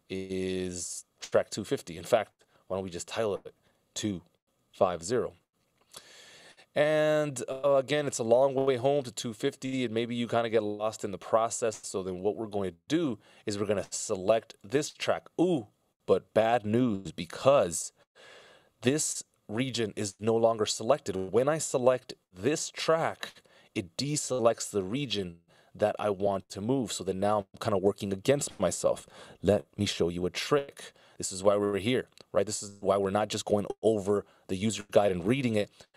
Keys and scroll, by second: 4.2 2, 16.7 d, 30.6 super+,.